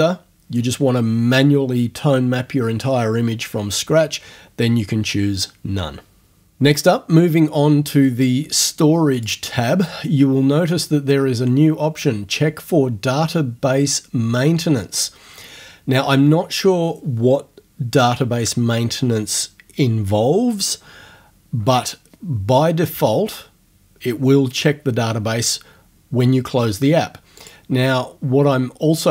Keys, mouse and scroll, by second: 9.2 click, 27.4 click.